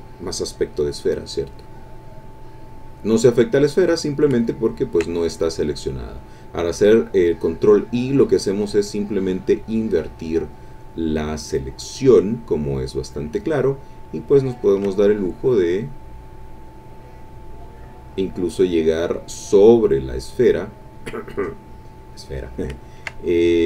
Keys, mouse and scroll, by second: 0.3-4.3 drag, 4.9-13.3 ctrl+drag, 14.0-21.0 ctrl+drag, 21.4-22.4 drag, 23.0-23.6 ctrl+drag.